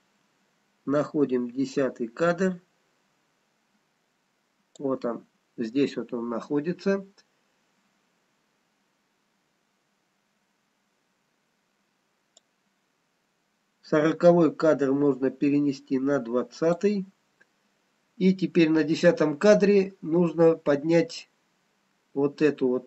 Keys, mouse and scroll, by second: 12.4 click, 20.0 scroll up 1, 21.3 click.